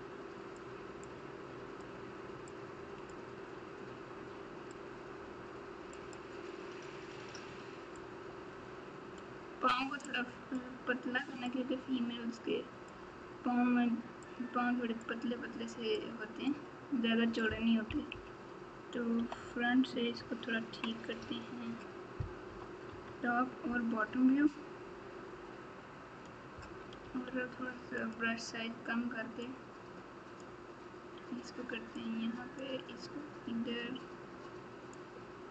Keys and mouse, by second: 1.0 click, 2.5 click, 4.7-6.1 drag, 8.0-9.2 drag, 10.0 click, 11.4-12.9 drag, 14.2 click, 15.9 click, 18.1 KP_1, 19.1 KP_8, 22.4 KP_7, 22.9 KP_9, 27.0 f, 29.4 click, 31.9 click, 34.9 click.